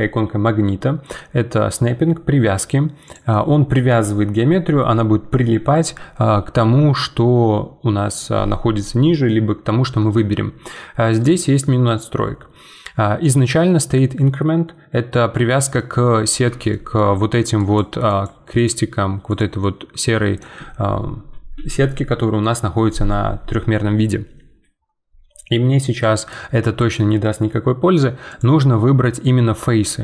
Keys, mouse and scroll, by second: 3.0-6.1 drag, 11.1-15.8 drag, 15.8 middle click, 16.2 scroll down 6, 16.7 shift+middle click, 17.4-20.4 typing, 17.6 click, 18.5 click, 19.3 click, 19.6 right click, 28.3-30.0 drag.